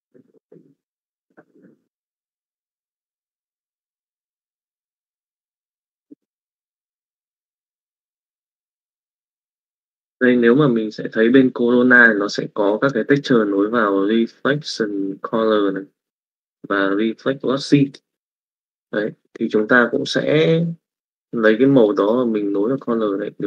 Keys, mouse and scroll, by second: 1.4-4.4 drag, 4.9-6.3 drag, 7.1 middle click, 20.2 middle click, 21.1 middle click, 23.0-23.4 drag.